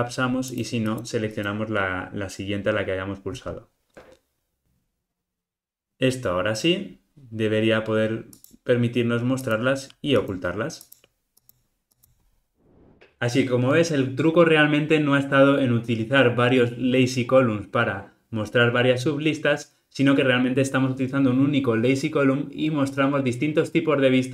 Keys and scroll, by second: 3.6 ctrl+alt+o, 3.9 alt+super+l, 4.6 ctrl+r.